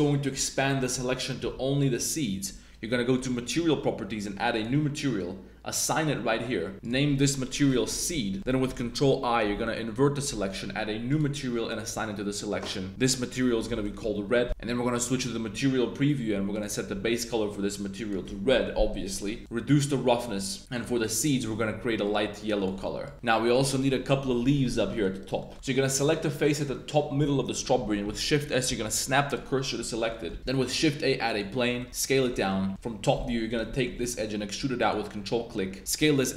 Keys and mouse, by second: 0.4 shift+click, 0.7 middle click, 0.9 z, 1.6 g, 1.9-3.0 drag, 5.8 click, 6.9-8.4 drag, 7.9 e, 8.4 middle click, 9.0-10.2 super+drag, 9.4 super+i, 11.9-12.4 drag, 12.9-13.9 shift+drag, 14.5 Tab, 14.6 Tab, 15.0 click, 18.6-19.1 middle drag, 19.5-20.6 drag, 20.7 click, 21.3 drag, 24.8 middle click, 25.2 right click, 25.4 middle click, 26.4 right click, 26.7 middle drag, 28.0 shift+s, 29.6 click, 29.9 Tab, 30.1 click, 30.4 shift+a, 31.8 Tab, 32.0 s, 32.1 click, 32.3 middle click, 32.7 KP_7, 33.2 2, 33.5 right click, 33.7 shift+middle click, 35.8 s.